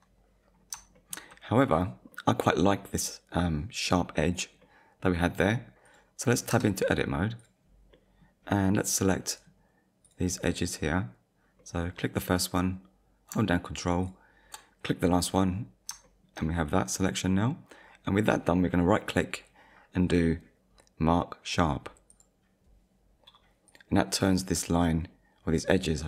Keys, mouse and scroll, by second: 0.5-1.0 scroll down 2, 1.0 shift+middle click, 1.3 middle click, 4.6 middle click, 5.9 click, 6.5 Tab, 7.4 click, 7.9 middle click, 10.0 click, 10.5 middle click, 11.6 middle click, 14.0 ctrl+click, 15.1 middle click, 16.0 shift+middle click, 17.4 scroll up 1, 19.0 right click, 22.1 click, 23.7 click, 24.5 scroll up 1.